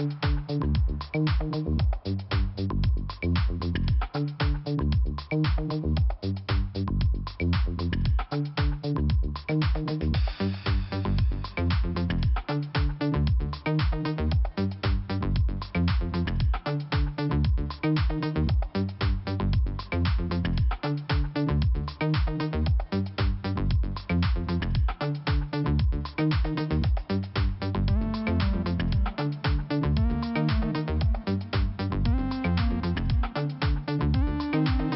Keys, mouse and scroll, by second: 1.4 click, 1.5 click, 3.3 click, 3.4 click, 4.6 click, 5.9 click, 6.0 click, 7.9 click, 8.0 click, 8.5 click, 8.6 click, 10.6 click, 10.8 click, 12.3 click, 13.6 click, 13.8 click, 16.1 click, 16.3 click, 16.9 scroll up 1, 17.9 click, 18.0 click, 20.9 click, 23.0 click, 26.3 click, 26.4 click, 27.4 click, 29.2 scroll up 2, 29.9 click, 34.5 click.